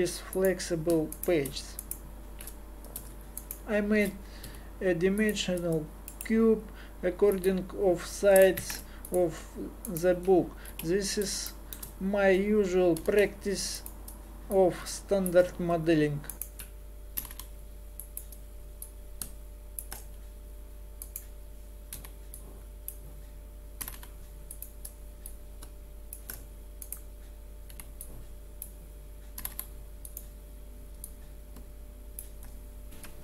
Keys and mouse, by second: 4.4 w, 8.6 ctrl+Tab, 10.7 KP_7, 13.0 g, 17.2 g, 21.9 b, 23.8 g, 25.3 click, 26.8 right click, 27.7 b, 28.6 click, 29.4 g, 31.1 click, 33.1 super+Pause.